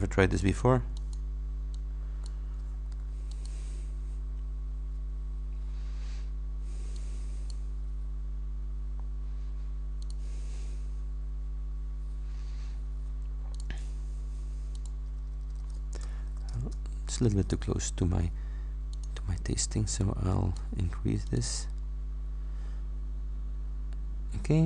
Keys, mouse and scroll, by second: 0.4 click, 1.0 click, 1.8 click, 3.4 shift+click, 7.0 click, 10.1 click, 13.6 click, 14.0-14.4 scroll up 1, 14.8 click, 16.1 shift+BackSpace, 16.4 shift+9, 16.6 shift+Return, 19.0 click, 20.0 click, 21.3 click, 21.8-22.5 scroll up 2.